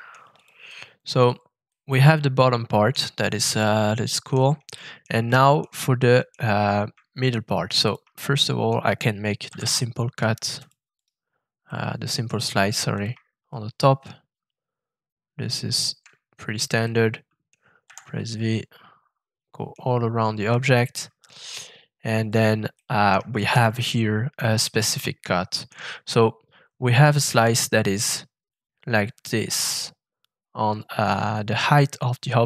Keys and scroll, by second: 9.4 shift+f, 17.8 shift+v.